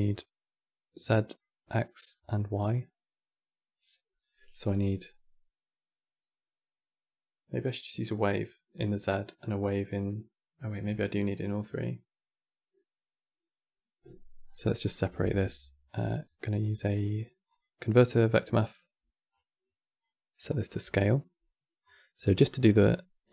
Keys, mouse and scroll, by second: 14.1-14.5 scroll up 6, 14.5-14.9 middle drag, 14.9 shift+a, 19.0-22.3 drag, 22.3-23.3 middle drag.